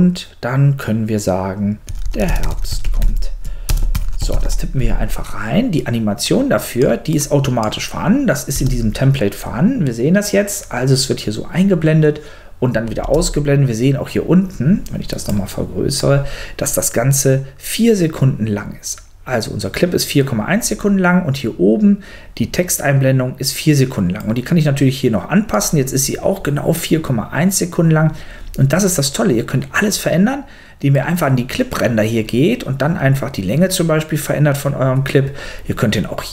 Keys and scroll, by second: 1.6-4.9 typing, 8.5 space, 13.0 space.